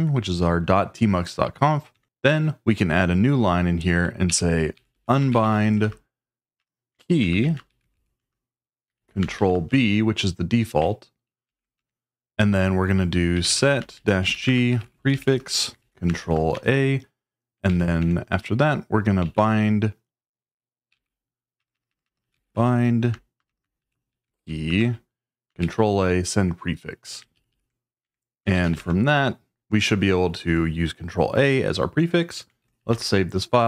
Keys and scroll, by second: 2.0 Return, 4.0-9.9 typing, 11.4 ctrl+e, 13.1-16.7 typing, 17.7 ctrl+e, 18.0 Return, 18.9-24.8 typing, 25.6 Tab, 27.3 ctrl+g, 27.5 ctrl+g, 28.0 Escape, 28.3-29.2 typing, 32.6 shift+;.